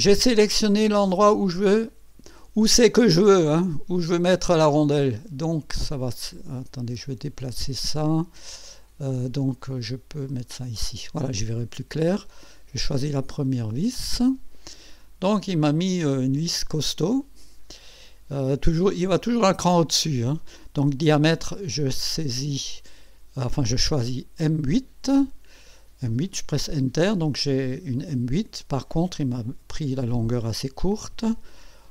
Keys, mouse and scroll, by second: 9.7 click, 13.4 click, 15.6 click, 17.2 click, 21.6 click, 22.1 click, 24.0 click, 27.4-28.7 drag, 30.2 click, 30.9 click.